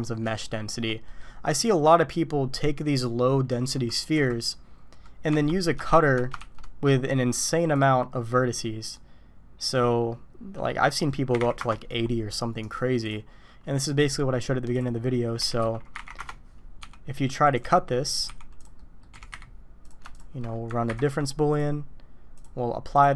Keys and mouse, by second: 0.4-0.7 shift+middle drag, 1.1 middle click, 4.1 KP_1, 5.3 Tab, 5.9 shift+middle drag, 6.4 shift+a, 8.8 click, 9.7-12.0 drag, 12.7 click, 14.7 click, 15.4 r, 16.8 s, 17.6 g, 18.2 s, 18.8 drag, 19.1 g, 20.9 ctrl+KP_Subtract, 21.5 click, 22.3 drag, 22.9 click.